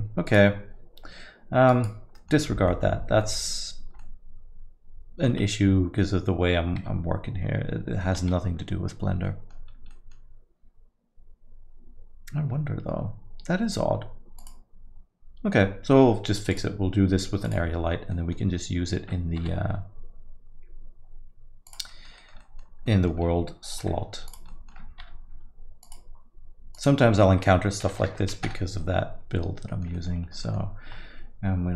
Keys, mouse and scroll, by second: 0.2 click, 1.7 click, 2.1 middle click, 2.5 scroll up 3, 2.7 middle click, 3.2 middle click, 3.7 scroll down 2, 4.0 alt+middle click, 4.0 alt+middle click, 8.0 middle click, 8.2 z, 9.2 middle click, 9.7 scroll up 2, 9.9 middle click, 14.4 click, 16.5 click, 18.1 click, 18.1 middle click, 19.4 g, 21.9 alt+middle click, 22.2 middle click, 22.4 alt+middle click, 22.9 middle click, 23.8 r, 24.5 middle click, 25.2 g, 26.7 click, 29.7 middle click, 29.9 alt+middle click, 30.3 scroll up 1, 30.4 middle click.